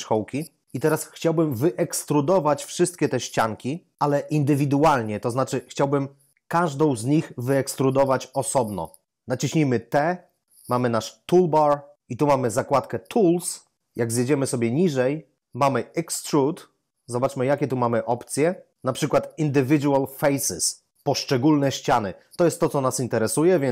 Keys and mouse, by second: 9.9 t, 17.4 click.